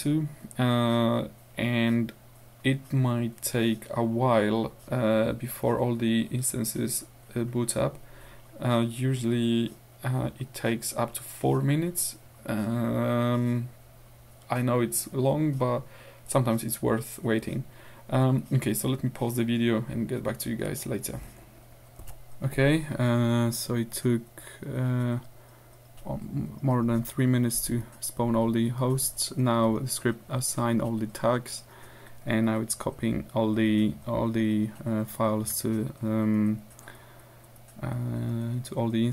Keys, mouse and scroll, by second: 22.4 ctrl+alt+r.